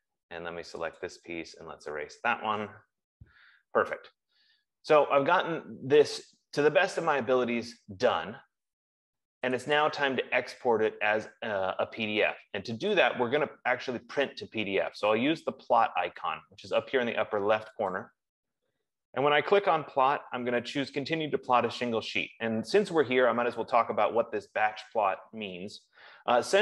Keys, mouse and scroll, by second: 1.6 click, 2.1-3.5 typing, 13.6 F15, 18.5 click.